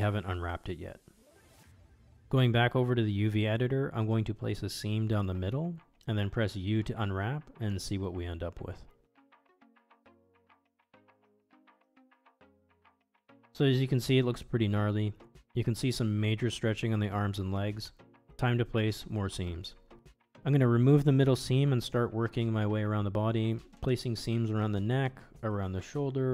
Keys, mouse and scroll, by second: 0.4 a, 0.8 shift+click, 2.9 middle click, 4.1 click, 5.1 ctrl+e, 7.6 click, 8.1 middle click, 9.2 click, 9.9 a, 10.6 u, 13.0 click, 13.2 middle click, 13.7 middle click, 14.3 Tab, 16.2-17.2 middle drag, 18.3-18.6 middle drag, 18.9 shift+middle drag, 19.8 ctrl+e, 22.7 middle click, 23.6 shift+middle click, 25.0 shift+middle click, 25.9 alt+click.